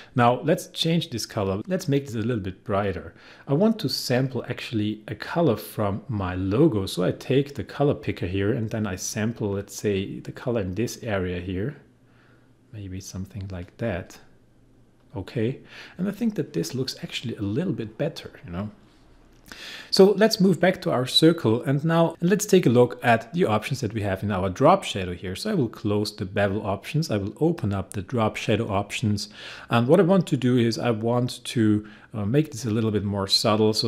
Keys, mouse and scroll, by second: 20.7 click, 25.6 click.